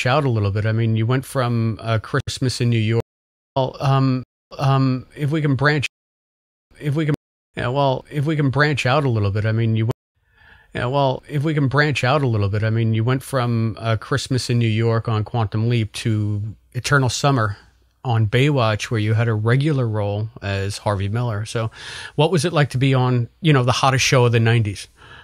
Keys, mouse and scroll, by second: 2.1 Delete, 2.9 space, 3.4 click, 3.6 space, 4.1 space, 4.3 click, 4.4 space, 4.9 click, 5.8 space, 6.4 ctrl+shift+Delete, 6.6 space, 7.1 space, 7.4 click, 7.4 space, 8.7 click, 9.1 click, 9.8 space, 10.0 click, 10.1 space, 11.9 click, 12.4-15.0 drag, 15.5 click, 19.2 click, 20.7 click, 21.4 click.